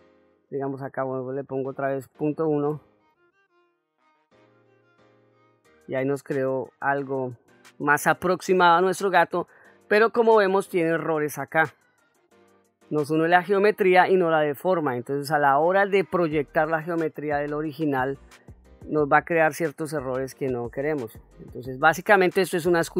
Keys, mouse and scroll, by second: 0.2 ctrl+z, 1.1-3.4 drag, 4.3 click, 6.3-7.1 middle drag, 7.6-8.1 shift+middle drag, 8.3-8.9 middle drag, 9.2-9.7 ctrl+middle drag, 10.0-10.6 middle drag, 12.8-13.5 middle drag, 13.8-14.2 middle drag, 14.4 middle click, 14.9-15.7 ctrl+middle drag, 15.9-16.3 ctrl+middle drag, 16.7-17.1 middle drag, 21.3 ctrl+z, 22.1 middle click.